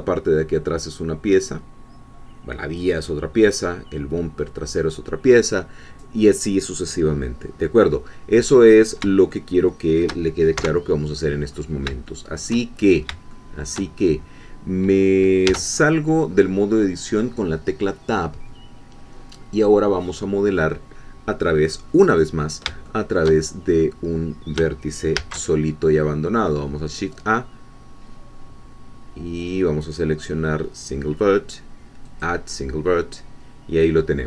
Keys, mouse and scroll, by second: 9.3 shift+middle click, 10.6 1, 11.5 scroll up 2, 12.1 shift+middle click, 12.8-13.1 shift+scroll up 2, 13.3 shift+middle click, 16.0 Tab, 22.3 scroll down 2, 22.8 shift+middle click, 25.2 shift+a, 32.0 click.